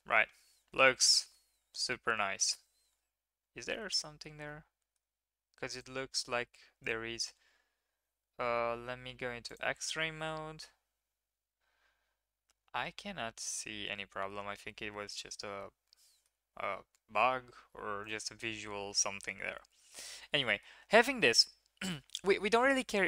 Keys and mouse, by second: 0.8 shift+middle drag, 1.2 middle click, 1.3 click, 1.9-2.5 drag, 3.7-4.2 middle drag, 4.5-4.8 middle drag, 4.8 click, 7.2 Tab, 9.5 right click, 10.1 click, 10.3-14.3 middle drag, 15.5 middle click, 18.0 click, 19.0 click, 20.2 shift+click, 20.5 middle click, 21.2 shift+middle click.